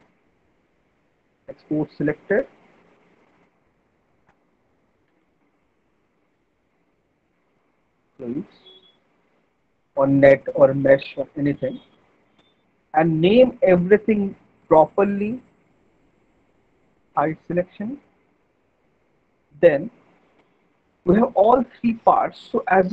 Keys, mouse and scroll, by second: 1.4 click, 3.2 click, 4.8-5.6 typing, 7.9-8.7 typing, 10.0 click, 12.4 click, 14.5 alt+middle click, 16.0 right click, 17.2 click, 18.0 alt+middle click, 18.9 middle click, 19.1 middle click, 19.2 alt+middle click, 19.3 middle click, 19.4 alt+middle click, 20.1 alt+middle click.